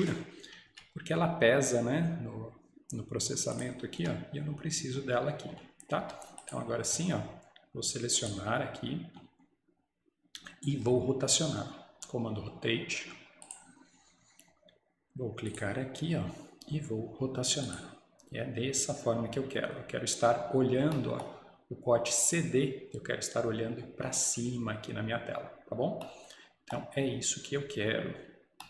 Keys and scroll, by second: 0.8 Delete, 4.0 Delete, 6.1 Escape.